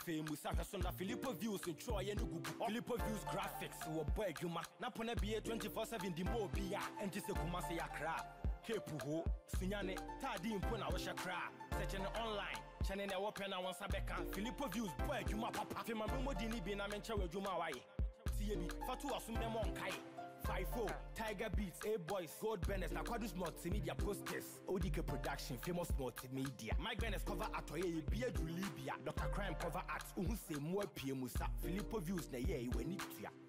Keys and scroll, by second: 17.7 ctrl+l.